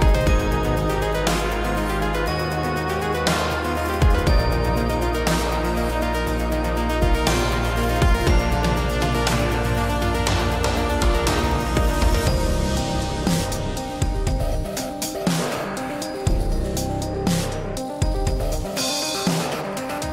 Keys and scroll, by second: 0.6 ctrl+t, 7.5 ctrl+t, 15.6 ctrl+u.